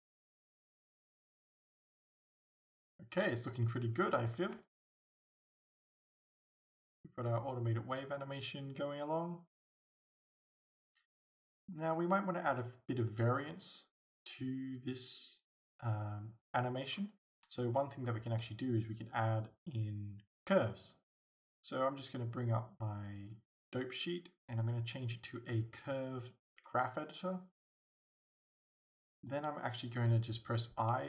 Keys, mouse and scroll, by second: 4.7 alt+a, 17.0 scroll down 1, 17.3 scroll up 1, 17.7-23.3 shift+middle drag, 23.3-31.0 drag.